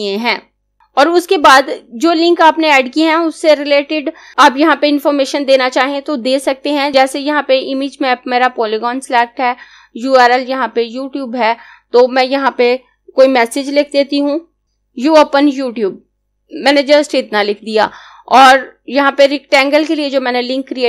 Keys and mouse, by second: 0.7 click, 14.4-17.5 typing.